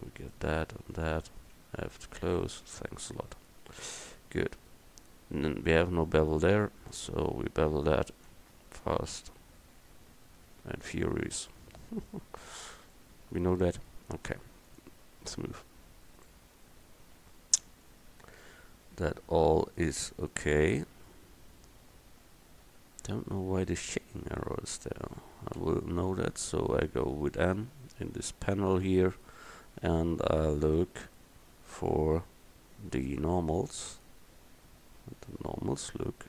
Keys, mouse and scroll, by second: 2.0 f, 2.5 Tab, 5.8 Tab, 8.4 ctrl+b, 11.2 Tab, 14.8-16.2 drag, 16.2 middle click, 16.7 right click, 16.7 click, 18.6 Tab, 19.0 Tab, 25.7 n, 30.9 Tab, 32.0 a, 34.0 middle click, 35.0 middle click.